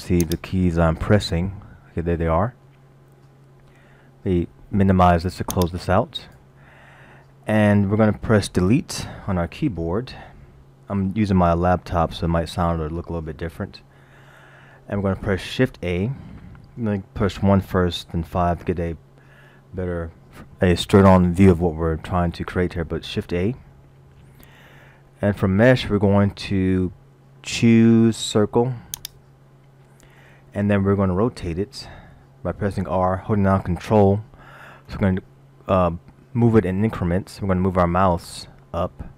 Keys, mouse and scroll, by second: 0.9 middle click, 1.4 scroll down 1, 1.6 scroll up 1, 1.8 scroll down 1, 2.7 middle click, 5.5 click, 12.0 Delete, 13.8 scroll up 1, 14.3 middle click, 17.6 KP_1, 17.6 KP_4, 18.3 KP_5, 19.6-19.9 scroll up 2, 24.1 shift+a, 33.0 r.